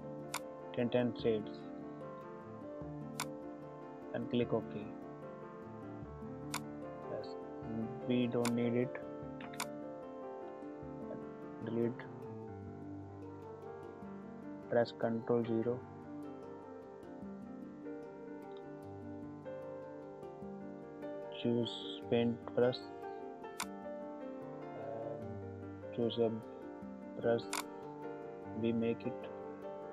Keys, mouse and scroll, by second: 3.2 click, 6.4-13.7 drag, 13.7 ctrl+-, 15.1 ctrl+=, 23.5 click, 27.4 click.